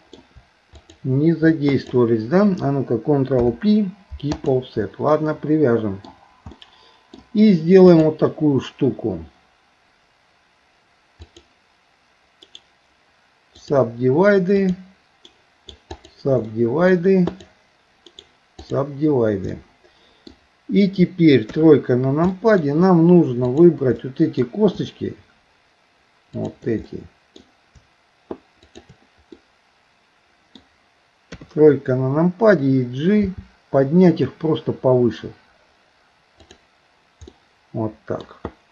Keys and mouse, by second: 0.8 shift+click, 1.7 shift+click, 3.4 ctrl+p, 5.2 middle click, 6.7 middle click, 7.9 click, 12.4-13.8 right drag, 14.6 click, 15.3 right click, 16.5 middle click, 17.3 click, 18.1 right click, 19.6 middle click, 21.5 KP_3, 22.4 middle click, 23.4 click, 24.0 middle click, 26.3 shift+click, 29.4-30.6 middle drag, 31.3 KP_3, 33.2 g, 37.4 middle click.